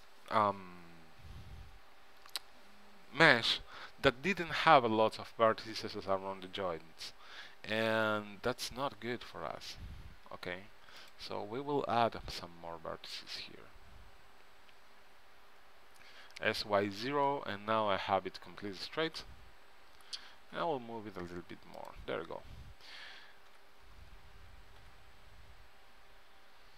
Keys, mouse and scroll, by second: 8.5 e, 15.8 s, 19.9 g, 23.7 e.